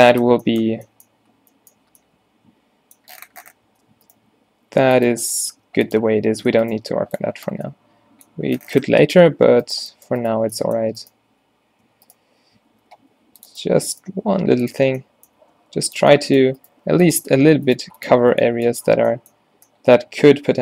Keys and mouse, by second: 0.8 a, 3.7 Tab, 4.6 g, 5.2 Tab, 5.6 Tab, 5.7 g, 6.1 Tab, 6.6 Tab, 6.8 g, 7.3 Tab, 8.9 Tab, 10.5 z, 11.4 z, 11.9 z, 12.8 ctrl+r, 13.8 z, 14.2 g, 14.8 Tab, 15.4 Tab, 15.7 g, 16.8 g, 17.3 Tab, 17.6 Tab, 17.8 g, 18.2 Tab.